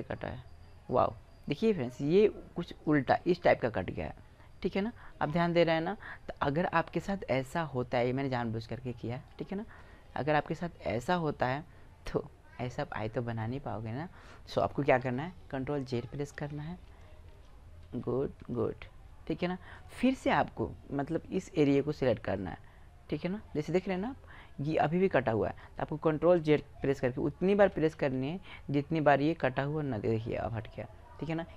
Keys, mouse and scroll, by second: 1.3-3.7 drag, 4.1 middle click, 4.5-9.6 middle drag, 9.6 right click, 10.1-11.9 middle drag, 15.6 ctrl+z, 16.1 ctrl+z, 16.7 ctrl+z, 17.1 ctrl+z, 17.6 ctrl+z, 18.2 ctrl+z, 19.5-21.5 right drag, 21.2 ctrl+z, 22.1-23.9 drag, 26.8 ctrl+z, 27.3 ctrl+z, 27.7 ctrl+z, 29.2-30.9 drag.